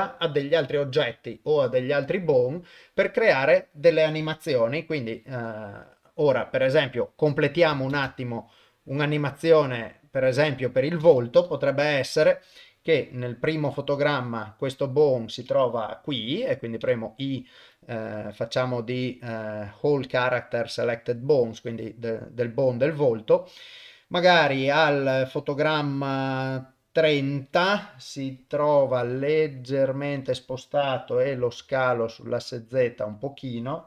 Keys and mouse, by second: 3.6 click, 7.3 click, 7.9 shift+space, 11.0 shift+space, 11.7 shift+Left, 13.7 click, 16.8 i, 19.0 typing, 25.8-27.5 drag, 29.0 g, 31.4 s.